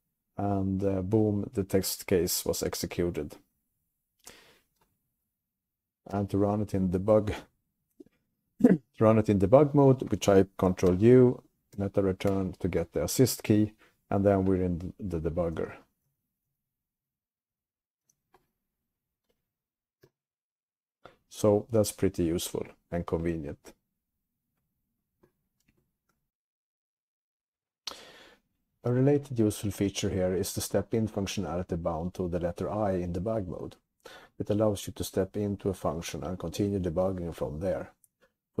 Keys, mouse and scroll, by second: 6.2 q, 11.0 ctrl+u, 12.8 alt+Return, 15.6-18.1 typing, 20.1 q.